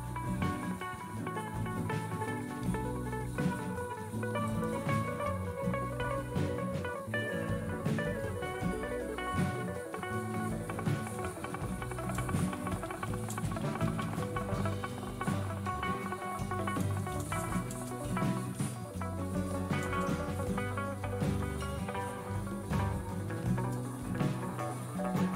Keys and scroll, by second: 9.2-14.7 typing, 15.2 Return, 16.4-19.8 typing, 21.2-22.4 typing, 23.8 Return, 25.2-25.3 typing.